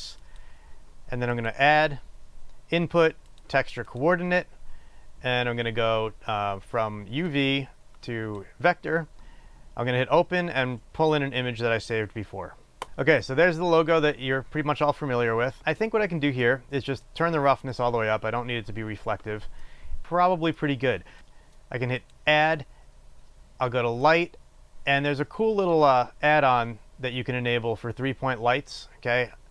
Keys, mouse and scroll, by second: 12.8 click, 17.8-22.6 drag.